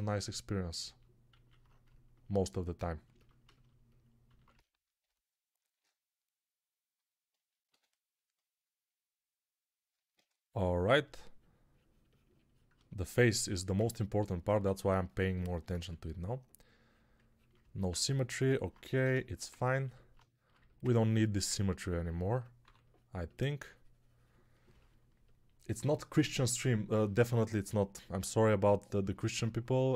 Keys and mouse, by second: 1.3 alt+q, 5.5 shift+r, 9.3 ctrl+r, 14.4 1, 15.6 ctrl+z, 22.5 3, 24.6-29.9 ctrl+alt+drag, 24.6-29.9 ctrl+alt+middle drag, 24.6-29.9 ctrl+alt+right drag.